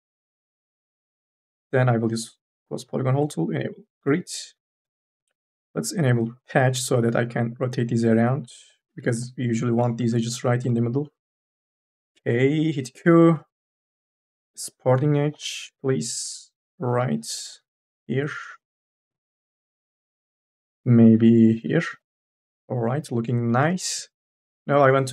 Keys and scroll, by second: 0.3 t, 8.9 2, 9.0 e, 9.8 2, 11.4 n, 12.5 q, 13.1 n, 13.4 a, 15.1-17.4 typing, 20.3 ctrl+z, 23.8 q.